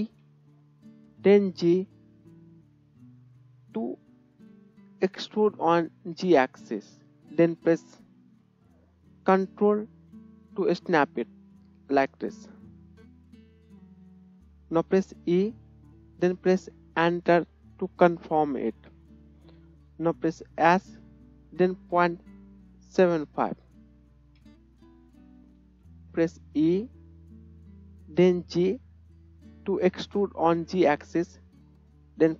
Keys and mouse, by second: 0.0 e, 14.1-18.7 middle drag, 15.2 e, 20.7 s, 21.9-24.4 middle drag, 25.6 KP_1, 26.6 e, 26.8-32.3 middle drag.